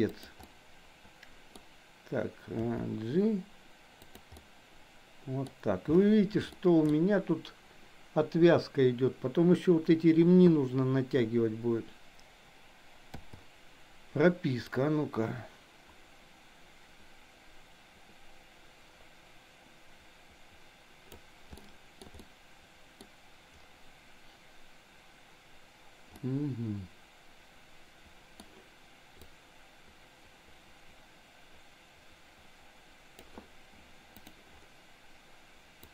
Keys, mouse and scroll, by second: 0.4-1.5 middle drag, 2.6 g, 4.3-5.5 middle drag, 6.5-6.9 shift+middle drag, 13.1 i, 14.8-21.3 drag, 21.5 shift+middle click, 22.1-23.0 middle drag, 26.3-28.4 middle drag, 29.3-33.3 drag.